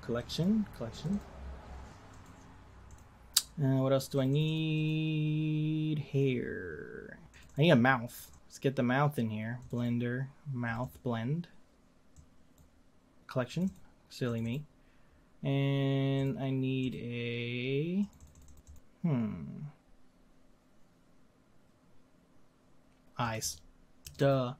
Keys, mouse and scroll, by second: 2.1-5.2 drag, 16.1-18.7 drag.